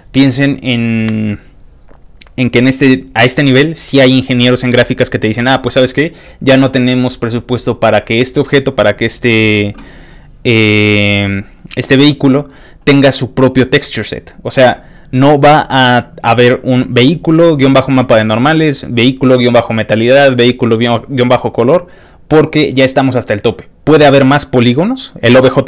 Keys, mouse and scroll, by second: 10.8 scroll down 2.